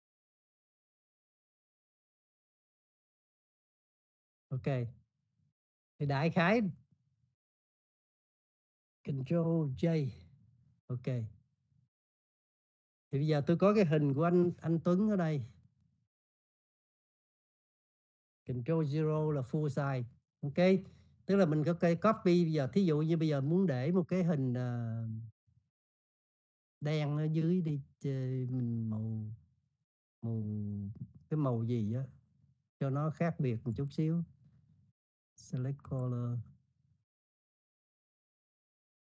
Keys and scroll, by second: 11.4 ctrl+j, 20.5 ctrl+0.